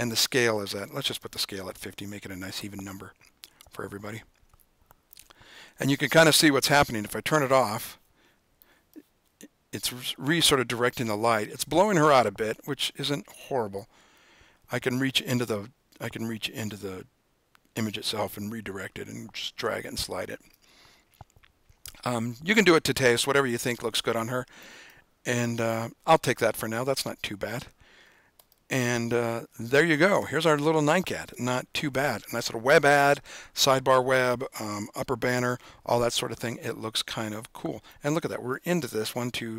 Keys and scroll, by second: 1.6-2.3 typing, 3.5 Tab.